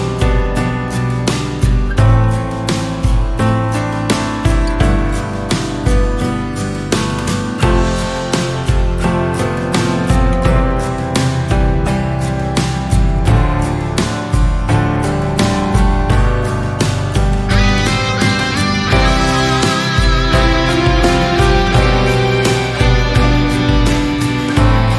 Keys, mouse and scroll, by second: 3.0 Tab, 3.1 Tab, 3.6 scroll up 1, 3.9 Tab, 4.2 middle click, 5.1 Tab, 5.9 KP_3, 6.5-7.1 shift+middle drag, 7.1 Tab, 7.6 /, 8.3 KP_3, 8.6 Tab, 8.9 click, 9.2-10.0 scroll down 1, 10.0 click, 10.2-11.0 scroll up 1, 11.0 click, 11.9 scroll down 1, 13.1 Tab, 13.6 shift+middle click, 14.4 scroll up 2, 15.5 alt+z, 16.1 shift+middle click, 16.4 click, 17.0-17.4 scroll down 2, 17.4 g, 20.4 scroll down 2, 20.5 middle click, 21.3 click, 21.7 g, 22.6 Tab, 22.8 middle click, 23.1 Tab, 23.3 middle click, 23.8 alt+z, 24.1 Tab, 24.3 drag, 24.5-24.9 middle drag.